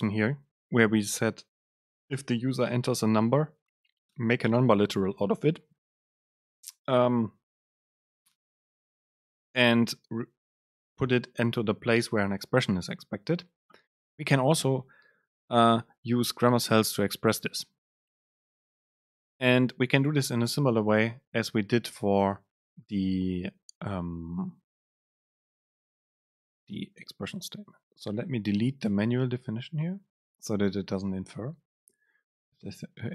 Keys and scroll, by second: 29.2 Delete.